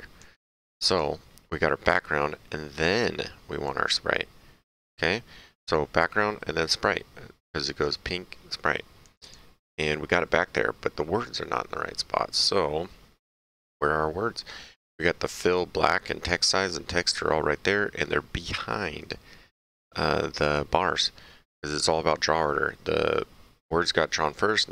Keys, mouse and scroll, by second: 0.9 click, 3.7 click, 9.0 click, 15.4 click.